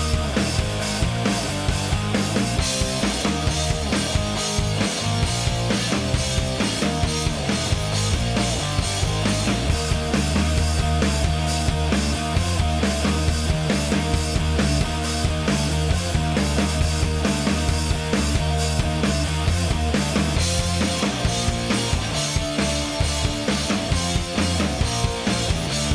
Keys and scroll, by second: 0.1 Escape, 2.4 ,, 5.8 2, 6.1 0, 7.5 F1, 12.4 Escape, 17.4 Return, 23.1 F1.